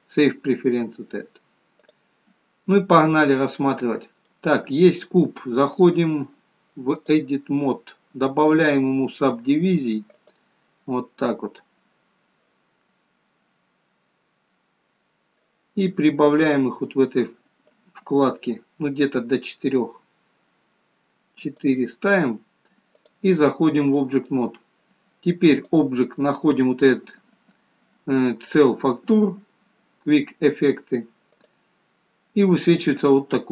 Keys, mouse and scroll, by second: 3.9 middle click, 6.2 click, 9.6 click, 12.1 scroll up 2, 16.7 click, 18.2 click, 23.4 click, 26.0 click.